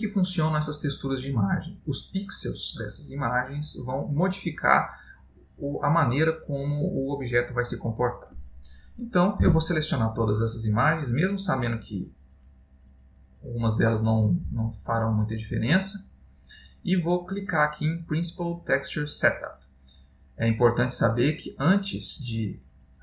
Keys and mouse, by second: 21.3 click.